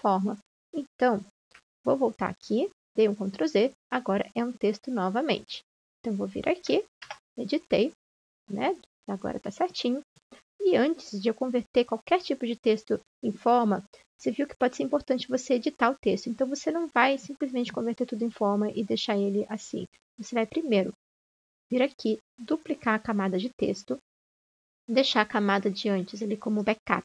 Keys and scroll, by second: 1.5 ctrl+z, 7.6 BackSpace.